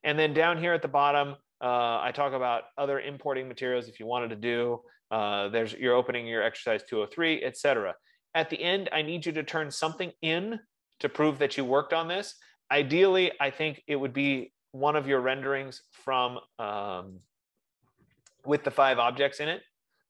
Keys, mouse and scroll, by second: 7.3 click, 9.1 scroll, 9.2-10.0 scroll down 6, 10.9 scroll up 5, 14.6 click, 15.9 scroll, 17.5 click, 19.0 F15.